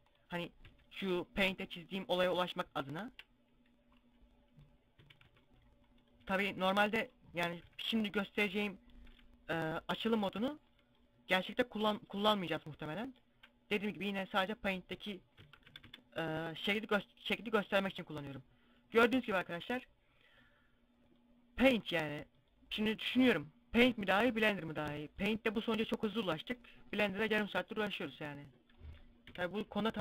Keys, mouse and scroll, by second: 0.0 s, 0.7 click, 0.7 g, 2.4 shift+click, 3.3 middle click, 4.4 a, 4.6 c, 5.4 right click, 5.7 c, 6.5 right click, 7.1 KP_7, 9.0 s, 9.8 click, 10.2 g, 12.6 shift+click, 14.4 Tab, 14.9 Tab, 15.1 a, 15.2 a, 16.1 scroll down 2, 18.6 middle click, 27.9 middle click, 29.0 KP_5, 29.8 a.